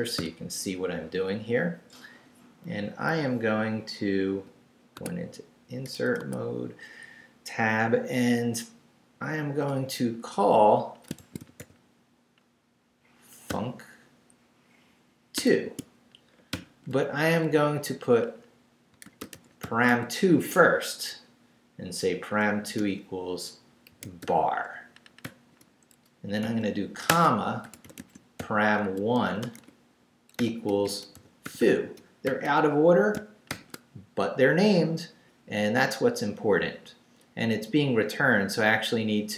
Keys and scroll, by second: 0.2 i, 4.4 i, 4.9 Tab, 5.8 BackSpace, 6.2 Tab, 11.2-12.1 typing, 13.5 c, 15.4 2, 18.7-20.4 typing, 22.0 =, 22.8 shift+', 23.8-25.2 typing, 26.4-33.5 typing, 37.3 Left.